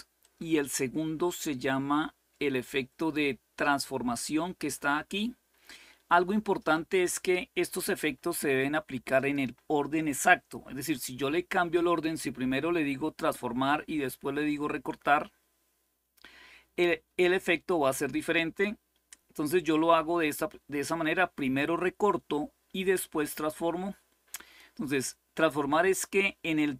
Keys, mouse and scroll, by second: 0.0-24.4 drag.